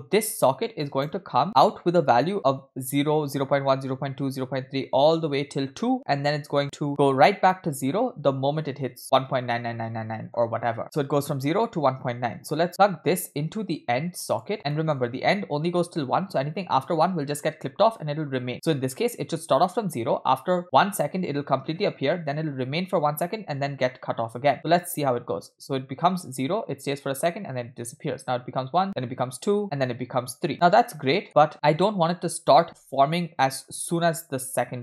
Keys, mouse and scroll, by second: 0.0-0.9 drag, 12.7-14.5 drag, 14.7 middle click, 18.5-19.0 scroll down 2, 18.7 middle click, 24.5 space, 30.5 space, 30.9 scroll down 2, 31.1 middle click, 31.5 scroll up 2, 32.1 click, 32.7 space, 33.8 space.